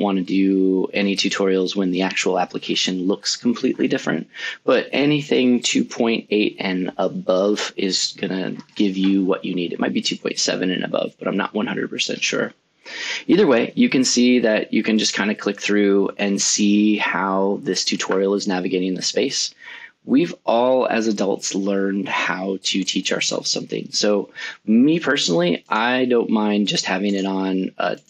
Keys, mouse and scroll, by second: 8.5 click, 14.7 click, 15.5 click, 16.6 click, 20.1 click.